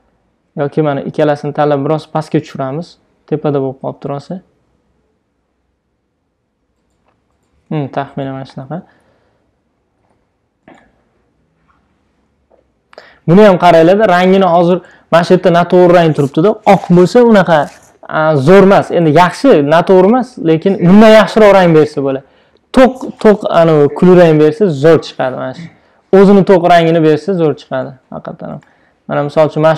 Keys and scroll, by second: 2.6 shift+Down, 4.3 shift+Down, 5.6 shift+Up, 9.4 shift+Down, 11.2 shift+Down, 12.7 shift+Up.